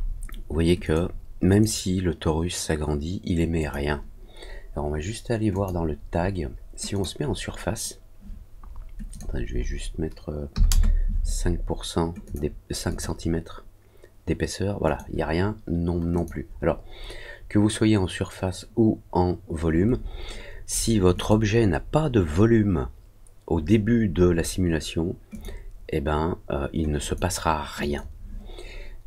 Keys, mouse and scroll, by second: 0.8 click, 1.4 click, 3.5 click, 5.4 click, 6.9 click, 9.0 click, 12.2 click, 12.8 click, 14.8 click, 16.1 click, 21.1 click, 25.3 click, 26.9 click, 27.7 click.